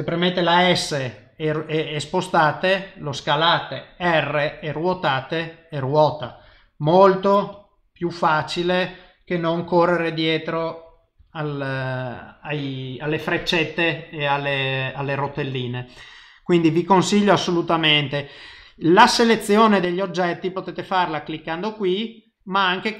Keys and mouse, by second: 0.7 s, 20.6 click, 22.2 click.